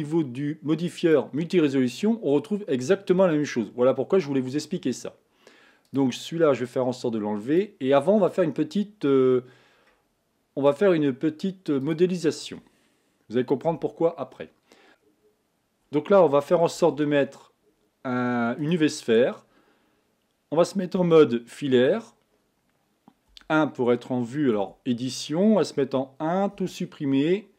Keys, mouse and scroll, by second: 5.9 click, 7.4 click, 10.7 click, 11.8 click, 13.7 KP_1, 16.8 shift+a, 21.0 z, 23.3 1, 24.6 Tab, 25.8 1, 26.6 a.